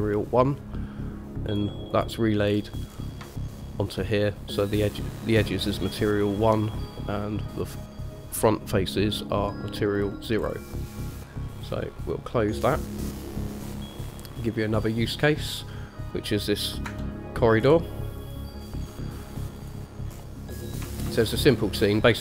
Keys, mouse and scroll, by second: 1.7 click, 2.1 click, 2.7-3.5 scroll up 3, 3.5-4.1 shift+middle drag, 6.8 middle click, 9.2-9.6 middle drag, 10.6-11.6 scroll down 2, 12.8 click, 14.4 click, 15.3 click, 17.0 KP_0, 17.8-18.4 scroll up 1, 18.4 click, 18.4 scroll up 1, 18.9 middle click, 19.8 click, 20.3-21.3 scroll up 4, 21.3-22.0 shift+middle drag.